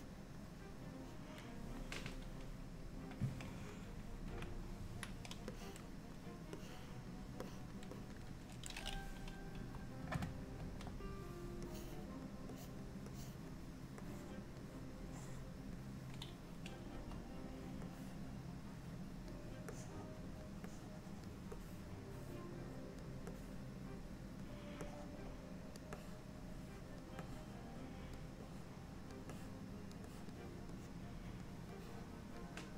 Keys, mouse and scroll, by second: 1.1 click, 4.3 KP_3, 5.6 click, 6.7 click, 7.5 click, 8.0 click, 9.6 KP_1, 10.6 ctrl+KP_1, 11.7 click, 12.6 click, 13.2 click, 14.1 click, 15.2 click, 17.0 KP_1, 18.0 click, 19.8 click, 20.8 click, 21.6 click, 23.4 click, 24.9 click, 26.1 click, 27.4 click, 28.6 click, 29.4 click, 30.2 click.